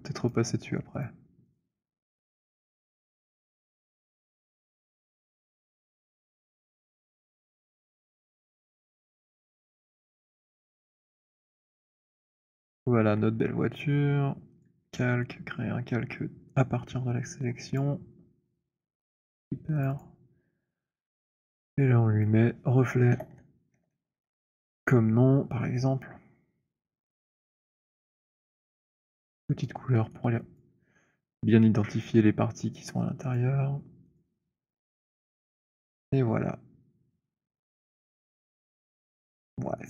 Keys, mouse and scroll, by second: 0.4 shift+click, 1.4 shift+click, 1.6 shift+click, 2.5 alt+right click, 3.6 alt+click, 4.7 alt+middle click, 5.4 alt+click, 6.0 shift+click, 7.2 alt+right click, 7.8 alt+click, 9.3 shift+click, 10.0 shift+click, 12.8 alt+right click, 14.6 click, 17.7 click, 19.0 click, 19.7 click, 19.9 click, 22.2 click, 22.8-25.2 typing, 27.0 click, 27.8 click, 28.5 click, 29.2 alt+middle click, 30.0 alt+click, 30.4 alt+click, 30.4 alt+right click, 30.7 alt+click, 33.2 click, 34.2 click, 34.9 alt+click, 37.8 click, 38.9 alt+click, 39.5 alt+middle click.